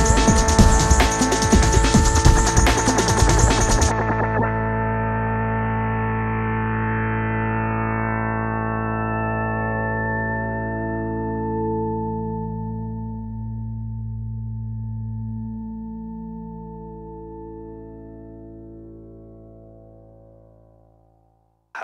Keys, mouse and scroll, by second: 0.6 ctrl+d, 1.2 click, 1.5 alt+scroll down 1, 2.1 alt+scroll up 1, 2.3 space, 2.4-2.8 click, 2.8 space, 3.5-6.4 drag, 8.1 space, 8.2-8.8 click, 8.8 space, 9.3 click, 11.6-12.5 drag, 13.7 Tab, 14.5 click, 15.2 ctrl+z, 15.7-16.5 click, 20.5 click.